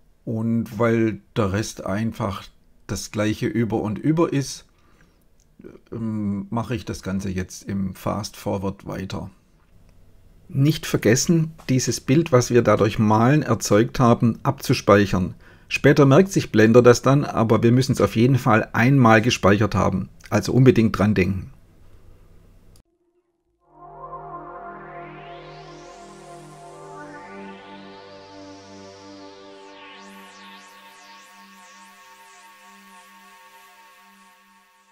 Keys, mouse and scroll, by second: 12.9 click, 13.7 KP_Divide, 14.2 right click, 15.8 click, 17.4-18.2 drag, 18.4 click, 19.2 click, 20.4 click, 21.9 click, 24.0-24.9 drag, 25.4 click, 26.3 click, 27.4 click, 29.4 click, 31.1 click, 32.0 click, 34.1 click.